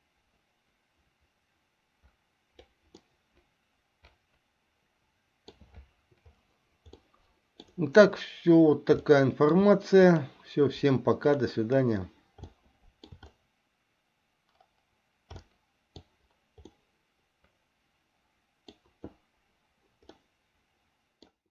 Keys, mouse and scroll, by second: 3.4-5.9 middle drag, 7.3 middle click, 9.3 shift+middle click, 10.4 click, 11.5 click, 12.8 shift+middle click, 15.5 shift+middle click, 16.9-19.0 middle drag, 20.3-21.5 middle drag.